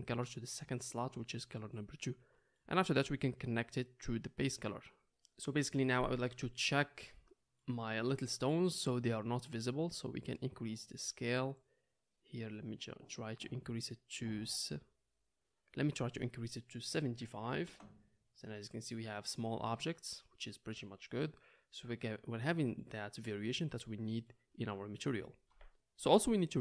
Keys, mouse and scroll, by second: 14.2-16.4 middle drag, 16.4-26.6 drag.